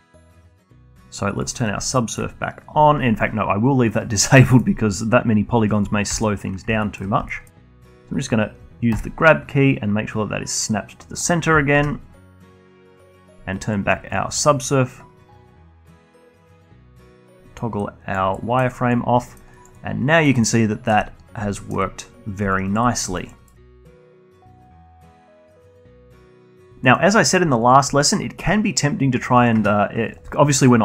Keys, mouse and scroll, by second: 2.3 click, 2.4 alt+middle click, 3.0-3.8 scroll up 1, 4.3 click, 4.7 scroll down 1, 5.0-6.6 alt+middle drag, 6.6 /, 7.0 scroll up 1, 7.3-9.4 alt+middle drag, 9.4 g, 12.2 Tab, 15.3 click, 15.9 alt+click, 16.4 z, 17.2 scroll down 1, 17.5-18.8 alt+drag, 18.8 alt+middle click, 19.1 alt+click, 19.7 alt+middle click, 20.0 alt+click, 20.2-20.9 alt+right drag, 20.9-21.6 alt+middle drag, 21.6-22.0 scroll down 2, 22.0-23.0 alt+middle drag, 23.0-23.4 alt+drag, 23.4 scroll down 1, 23.6-23.9 alt+drag, 23.9 alt+middle drag, 24.1-26.7 alt+drag, 26.7 middle click, 27.5-29.3 alt+drag, 29.3 middle click, 29.5 Tab, 30.5-30.8 alt+drag.